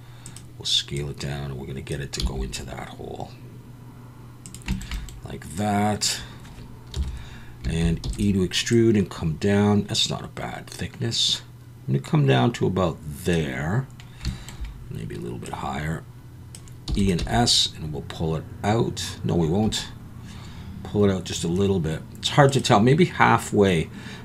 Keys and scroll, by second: 2.2 s, 7.0 KP_1, 8.0 e, 16.9 e, 17.2 s.